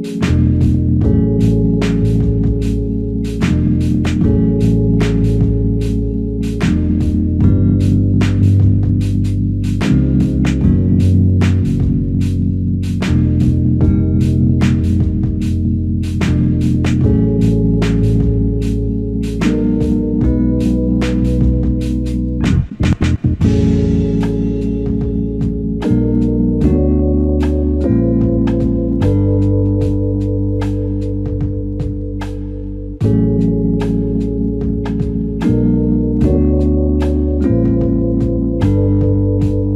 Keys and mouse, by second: 0.0 double click, 2.7 alt+click, 6.9 alt+click, 9.9 ctrl+z, 10.2 ctrl+z, 11.0 ctrl+z, 12.4 ctrl+z, 13.2 typing, 14.3 alt+click, 16.9 double click, 18.0 alt+click, 19.8 double click, 21.5 alt+click, 22.6 double click, 23.3 alt+click, 25.1 double click, 28.2 alt+click, 30.2 double click, 32.6 f, 34.5 alt+click, 36.0 double click, 38.6 alt+click, 39.6 double click.